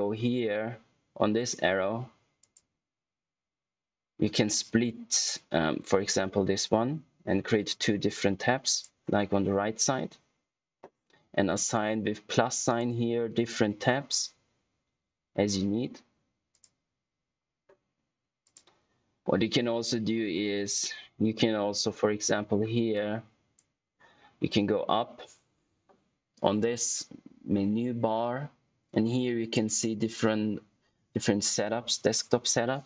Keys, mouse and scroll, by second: 2.3 click, 8.6 click, 12.6 click, 16.4 click, 18.4 click, 22.9 click, 29.5 click.